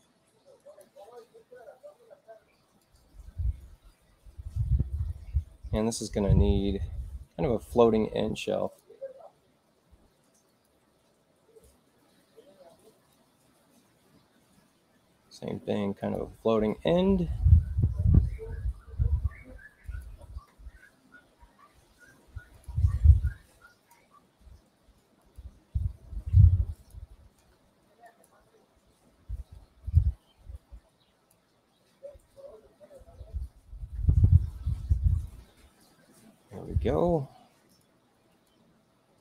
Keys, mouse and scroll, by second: 0.5 click, 2.8-5.7 drag, 8.6 click, 10.4 click, 16.0 click, 19.8 click, 22.0 space, 22.5 click, 23.2 click, 25.1 click, 26.7 click, 28.0 click, 29.9-31.3 drag, 37.6 right click, 38.2 click.